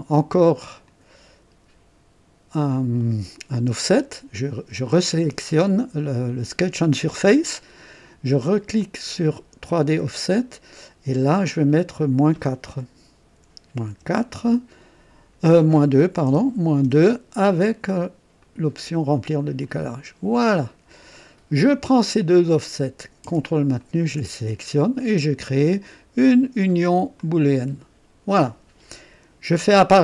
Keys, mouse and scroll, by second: 0.8 click, 4.7 click, 8.8 click, 9.6 click, 11.7 click, 13.3 KP_Subtract, 13.9 KP_4, 16.3-16.8 typing, 18.4 click, 19.6 click, 20.6 click, 22.4 click, 22.6 typing, 23.8 ctrl+click, 27.1 click.